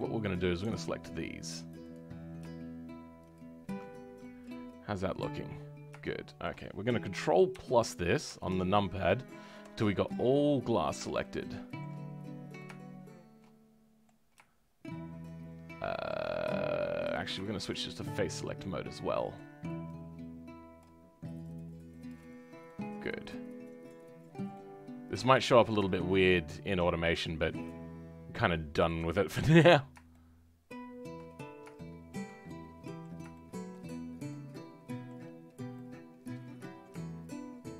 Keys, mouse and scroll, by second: 1.9 alt+click, 3.8-4.2 scroll down 5, 4.2-5.3 middle drag, 5.3 scroll up 2, 6.0-7.5 shift+middle drag, 7.5 ctrl+KP_Add, 8.2 ctrl+KP_Add, 10.3-12.1 middle drag, 12.1-12.5 scroll up 1, 12.5-17.1 middle drag, 17.1 click, 18.6-20.8 shift+middle drag, 20.8 shift+click, 22.0 shift+click, 22.3-22.6 scroll down 2, 22.6 middle click, 23.4-24.1 scroll up 2, 24.5 middle click, 25.4-26.8 scroll down 1, 26.8-28.3 scroll up 1, 28.3-29.3 middle drag, 29.3 KP_7, 30.1-31.2 shift+middle drag, 31.2-31.7 scroll up 6, 31.7-33.8 shift+middle drag, 33.8-34.2 scroll up 2, 34.2-35.3 middle drag, 35.3-35.7 scroll up 2, 35.7-37.6 middle drag, 37.6 shift+click.